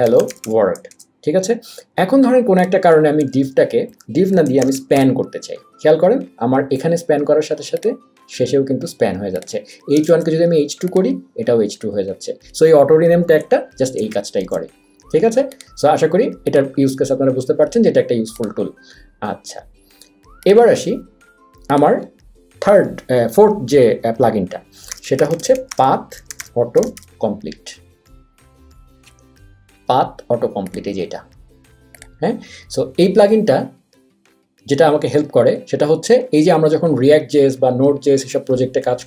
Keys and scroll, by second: 0.0-0.9 typing, 3.2-5.4 typing, 10.0 BackSpace, 10.1 2, 14.0 super+s, 14.4 super+w, 24.6-27.4 typing.